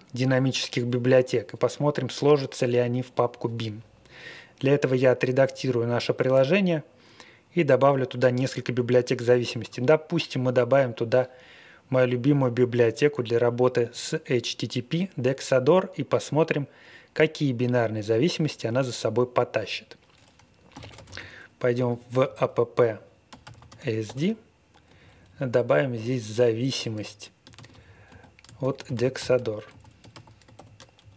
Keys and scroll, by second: 20.5-23.4 typing, 23.2 Tab, 23.6 Tab, 24.0 Return, 24.8 Up, 25.0 Up, 25.2 Up, 25.3 Up, 25.5 Up, 25.6 Up, 25.7 Up, 25.9 Up, 26.0 typing, 26.1 Up, 26.7 Up, 27.5-31.1 typing.